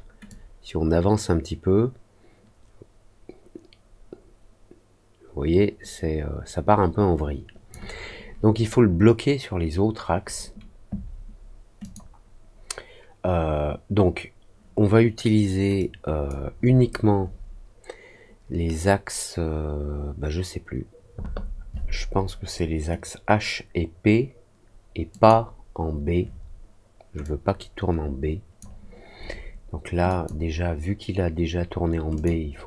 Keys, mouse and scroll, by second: 0.2-7.6 drag, 11.7 click, 15.7 click, 25.0 click, 27.2-28.5 drag, 30.0 click, 32.1 click.